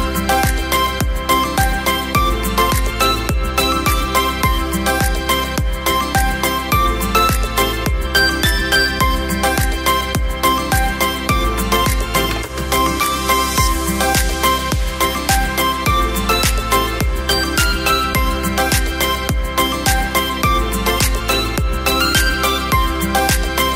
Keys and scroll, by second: 11.6 [, 12.8 Caps_Lock, 13.4 ], 21.6 v, 23.5 v.